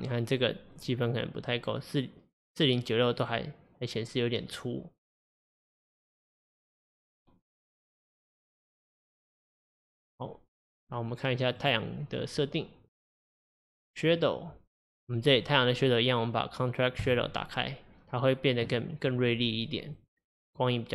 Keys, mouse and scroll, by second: 1.4-3.3 drag, 5.2 click, 5.9 click, 7.7-10.7 drag, 10.8-11.6 scroll down 3, 11.6 click, 12.9 click, 14.2-15.4 drag, 15.4-17.1 scroll up 2, 17.1 click, 20.0 click.